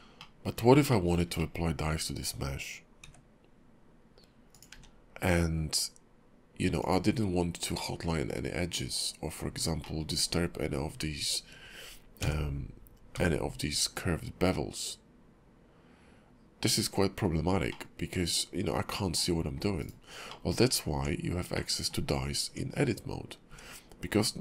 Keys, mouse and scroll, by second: 0.2 middle click, 0.9 shift+middle click, 1.4 middle click, 1.8 KP_5, 3.0 q, 4.5 click, 4.7 q, 7.8 middle click, 9.8 middle click, 17.7 middle click, 20.3 middle click, 20.9 Tab, 21.5 middle click, 22.5 Tab, 23.5 `, 23.9 KP_5, 24.3 KP_5.